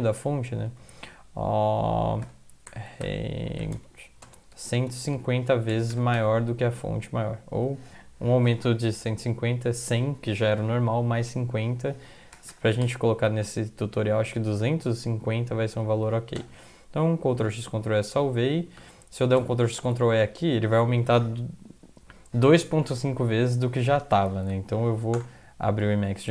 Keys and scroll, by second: 0.7 typing, 2.4-6.2 typing, 12.4 BackSpace, 12.5 BackSpace, 12.8 BackSpace, 14.0-15.1 typing, 16.1 ctrl+x, 16.4 ctrl+s, 18.8 End, 19.4 ctrl+x, 19.8 ctrl+e, 24.4 alt+F4, 24.9 Up, 25.1 Return.